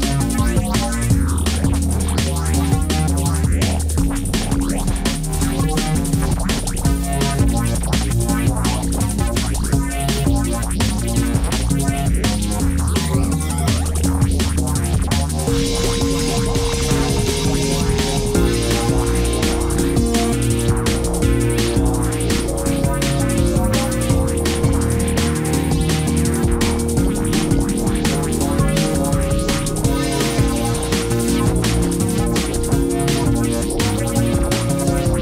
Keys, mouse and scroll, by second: 11.7 ctrl+-.